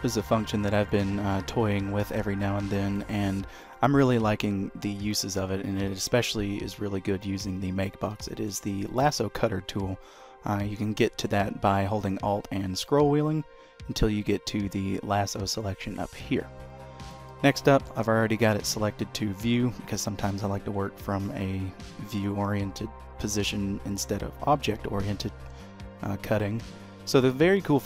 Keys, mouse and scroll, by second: 0.3 shift+middle click, 0.7 middle click, 2.1 KP_3, 2.9-3.2 scroll up 1, 3.4 shift+middle click, 6.9 scroll up 1, 7.2 shift+middle click, 8.1 shift+middle click, 11.9-12.8 alt+scroll down 2, 12.8-14.2 alt+scroll up 2, 17.3 shift+middle click, 18.1 d.